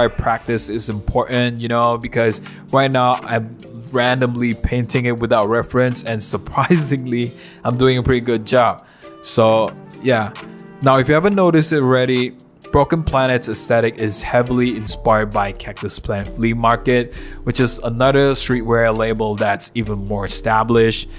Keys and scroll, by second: 0.1 super+z, 2.7 super+z, 3.4 ], 3.7 ], 4.6 [, 4.7 ], 6.2-7.8 typing, 8.1 super+z, 11.4 super+z, 13.8 super+z, 15.5 ], 15.6 ], 16.3 [, 16.4 [, 19.5 ], 19.6 ], 20.3 ].